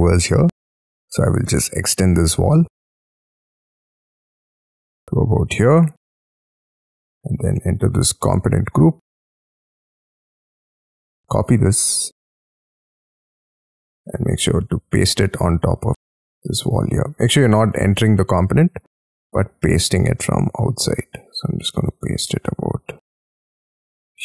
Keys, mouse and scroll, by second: 0.9 double click, 2.7 p, 3.5 j, 5.1 middle click, 5.5 space, 5.6 Escape, 6.7 scroll up 6, 6.8 shift+middle click, 7.6 double click, 8.3 Escape, 9.2 double click, 10.7 double click, 11.0 ctrl+c, 11.5 middle click, 12.7 double click, 13.7 j, 14.4 Escape, 15.0 middle click, 16.0 ctrl+v, 17.3 space, 17.8 double click, 18.0 double click, 18.8 Escape, 18.9 Escape, 20.3 ctrl+v.